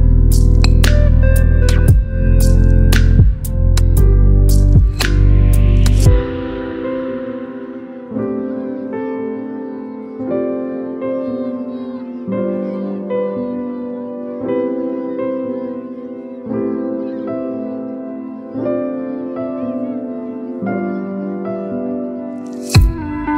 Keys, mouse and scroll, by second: 1.8 click, 2.5 alt+scroll down 1, 3.7 0, 6.0-9.0 drag, 9.8 ctrl+t, 11.6-13.0 alt+drag, 16.9 BackSpace, 17.4 shift+i, 19.7 click, 21.5 ctrl+t, 23.0-23.3 alt+drag.